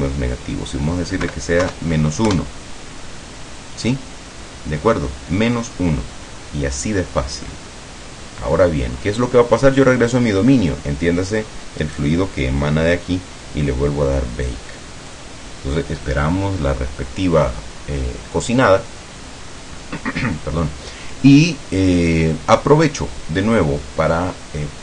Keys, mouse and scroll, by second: 1.3 KP_Subtract, 1.7 KP_1, 2.4 KP_Enter, 7.1 scroll down 2, 7.5-8.9 middle drag, 9.0 scroll up 2, 11.9 right click, 15.2 click.